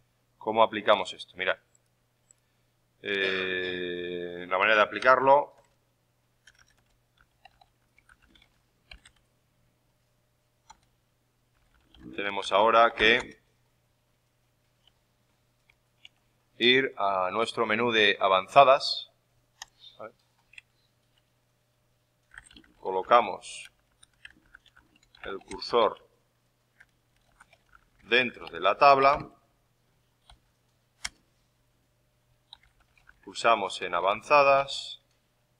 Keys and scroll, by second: 6.8-9.5 typing, 14.8 alt+Tab, 20.5 alt+Tab.